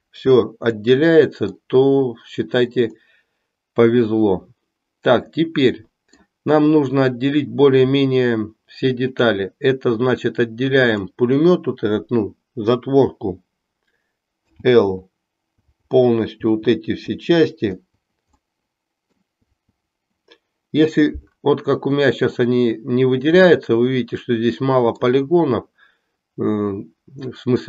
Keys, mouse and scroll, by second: 0.9 middle click, 2.9-6.2 middle drag, 10.8 click, 14.4 l, 18.4 middle click, 23.4-25.2 middle drag.